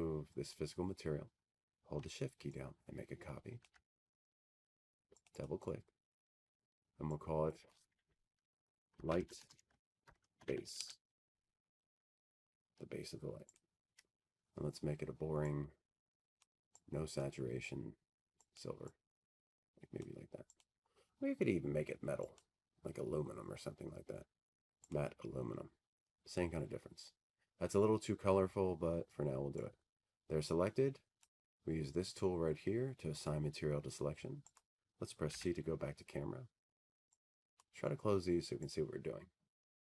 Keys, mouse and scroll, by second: 0.4 ctrl+click, 6.1 click, 9.3 shift+click, 10.9 click, 11.1 click, 13.2 click, 14.2-17.8 typing, 19.2 click, 22.1 click, 22.8 click, 24.1 click, 25.5 click, 26.2 click, 28.1 click, 30.5 click, 36.8 click, 39.1 click.